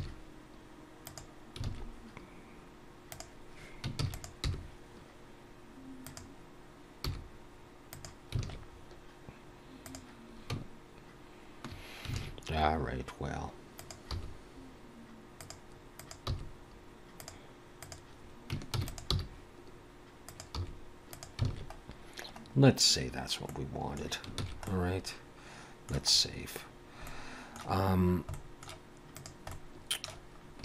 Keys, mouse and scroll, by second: 0.0 r, 1.7 alt+a, 3.1 click, 4.0 shift+d, 4.4 g, 7.1 r, 8.4 alt+a, 8.7-9.6 scroll down 3, 9.9 click, 12.2 alt+a, 13.8 click, 14.1 g, 16.0 click, 16.3 g, 17.8 click, 18.7 shift+d, 19.1 g, 20.6 r, 21.5 alt+a, 21.8-22.2 scroll down 2, 22.5-23.1 scroll up 1, 23.5 middle click, 23.5 scroll up 1, 24.5 ctrl+s, 24.7 middle click, 26.1-27.1 scroll up 1, 27.1 middle click, 27.1 scroll up 2, 28.4 middle click, 29.2 click, 29.5 middle click, 30.4 scroll down 2.